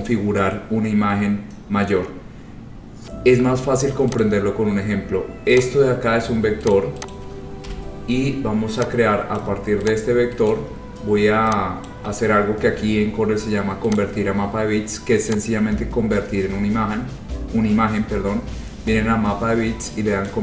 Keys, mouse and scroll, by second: 2.4-2.9 scroll, 4.3 click, 4.5 scroll, 5.1 scroll, 5.7 click, 6.3 scroll, 6.8 click, 7.3 click, 7.8 Delete, 8.3 scroll, 9.5 click, 10.7 shift+click, 11.0-11.4 scroll, 12.0 shift+click, 13.5 scroll down 2, 14.1 click, 20.3 click.